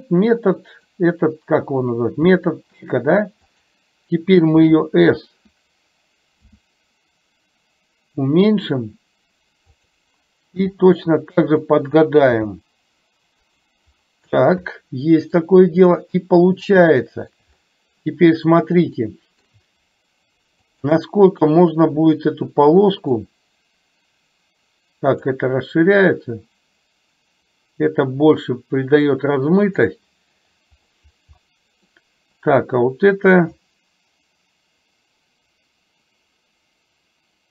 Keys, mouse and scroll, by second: 2.4 g, 4.6 d, 6.6 s, 10.7 g, 12.5 g, 14.6-15.5 middle drag, 16.4 middle click, 17.0-17.5 shift+middle drag, 19.1 shift+middle click, 20.7 click, 23.2-25.4 drag, 26.1-29.9 drag, 31.6 middle click, 33.6-37.5 drag.